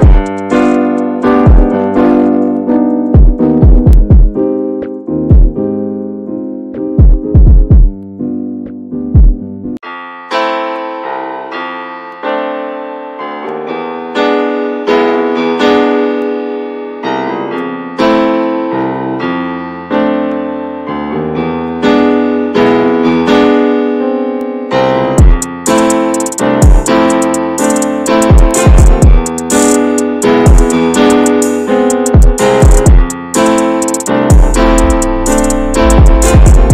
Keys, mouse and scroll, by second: 0.5 scroll up 1, 0.6-1.2 scroll down 3, 1.2-1.9 middle drag, 1.9 click, 3.4 click, 3.7 scroll down 2, 4.0-5.5 middle drag, 5.5-7.2 drag, 7.5-9.2 drag, 9.2-10.3 middle drag, 10.3 click, 10.5-11.3 middle drag, 11.3 scroll down 1, 11.5-14.1 middle drag, 14.1-14.7 drag, 14.9 scroll down 2, 15.1-16.0 shift+middle drag, 16.0 scroll up 2, 16.3-17.6 shift+middle drag, 17.6 scroll up 1, 17.8-19.6 shift+middle drag, 19.6-20.4 scroll up 3, 19.9 shift+middle drag, 20.4-23.0 middle drag, 23.0 ctrl+s, 23.7 scroll down 1, 23.9-25.8 middle drag, 25.8 click, 26.0 scroll up 2, 26.3-29.0 middle drag, 29.0 scroll up 3, 29.3-31.8 middle drag, 31.8 click, 32.4 scroll down 1, 33.0 scroll down 10, 33.8-35.0 scroll up 3, 35.6-36.7 drag.